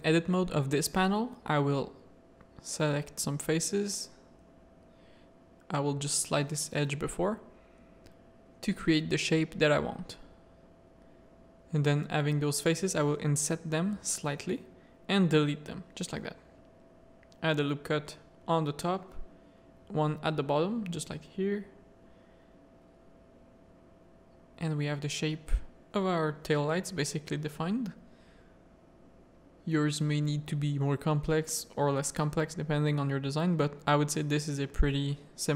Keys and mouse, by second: 1.4 middle click, 2.1 2, 2.3 click, 3.6 g, 7.5 3, 7.7 click, 8.6 ctrl+click, 9.2 ctrl+click, 10.2 ctrl+click, 10.5-14.7 middle drag, 12.2 i, 14.2 x, 16.2 1, 16.7 ctrl+r, 18.5 middle click, 19.0 ctrl+r, 22.2 Tab, 22.6 alt+a, 23.1 middle click, 23.6 z, 24.0-25.5 middle drag, 26.3-27.8 middle drag, 28.0 middle click, 28.3 z, 28.6 Tab, 29.5 ctrl+r, 31.0 ctrl+r, 32.3 Tab, 32.7 alt+a, 33.1 middle click, 33.6 z, 34.9 shift+click.